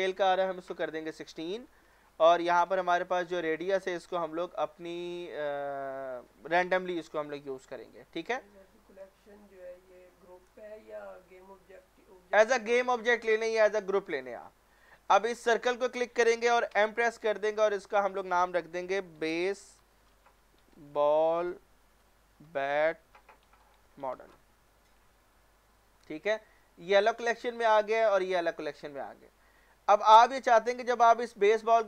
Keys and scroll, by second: 1.0 typing, 1.4 Return, 16.7 m, 19.2-21.0 typing, 22.4-24.0 typing, 24.3 Return.